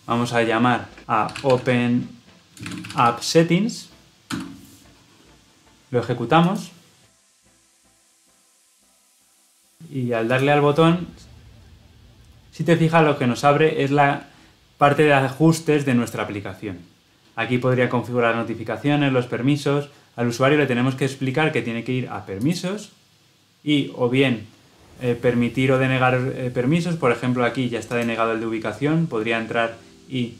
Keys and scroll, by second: 4.2 Return, 6.4 shift+F10.